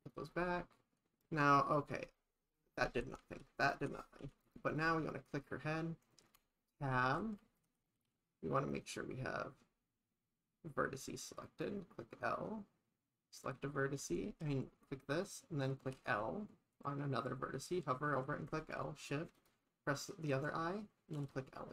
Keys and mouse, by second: 0.0 click, 2.9 shift+`, 4.7 click, 6.4 Tab, 7.1 shift+`, 11.5 click, 16.1 l, 19.4 shift+click, 21.2 l.